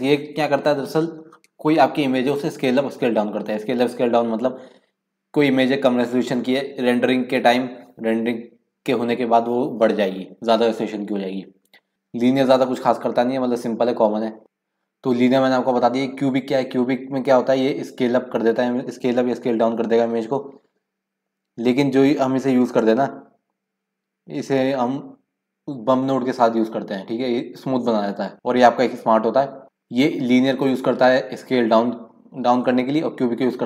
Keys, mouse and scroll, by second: 4.2-7.5 scroll up 1, 7.5-9.5 scroll up 1, 9.5-14.2 scroll up 1, 14.2 scroll up 1.